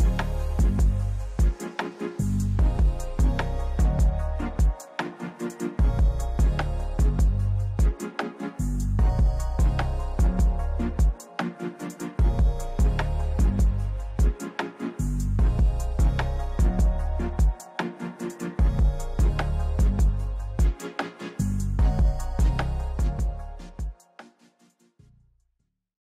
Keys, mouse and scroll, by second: 0.4 middle click, 1.3 right click, 4.0 middle click, 5.1-6.3 right drag, 8.1 click, 11.6 right click, 19.1-20.2 right drag, 21.5 right click.